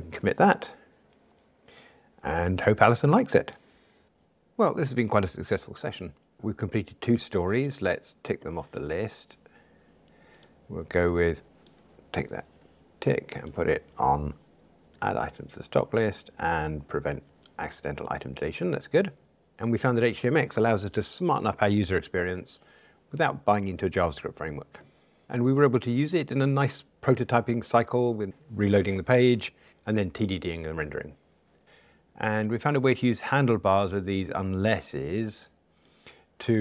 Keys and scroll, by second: 12.3 super+c, 15.0 super+c, 15.1 super+v.